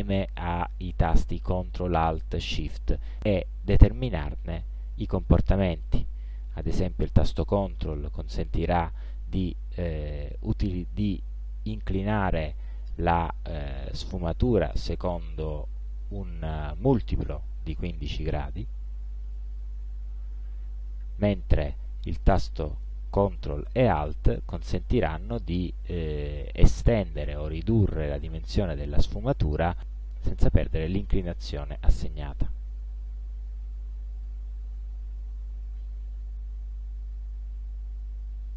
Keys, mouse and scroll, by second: 7.1-22.6 ctrl+drag, 24.5-31.7 ctrl+alt+drag, 34.2 click.